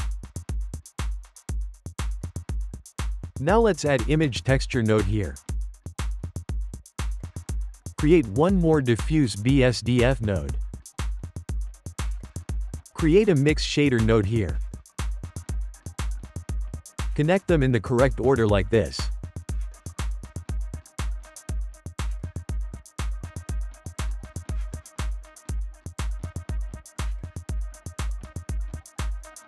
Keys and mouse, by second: 2.4-3.2 ctrl+shift+middle drag, 3.2 shift+a, 7.3 shift+a, 10.7 shift+middle click, 11.3 shift+a, 15.4-17.3 ctrl+middle drag, 17.3 click, 18.7 click, 21.6 click, 24.0 click, 25.6-26.6 drag, 27.6 click, 27.7 g, 28.5-29.3 shift+middle drag, 29.3 click.